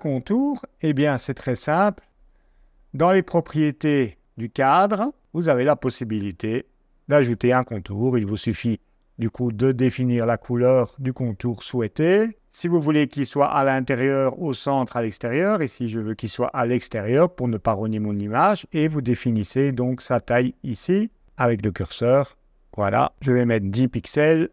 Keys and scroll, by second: 23.0-23.9 typing, 24.4 super+a.